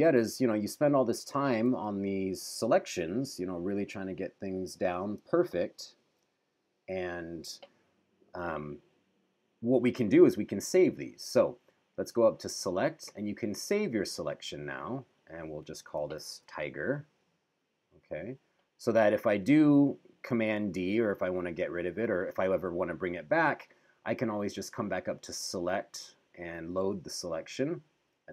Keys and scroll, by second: 1.9 super+=, 5.4 super+-, 15.6-16.9 typing, 20.6 super+d.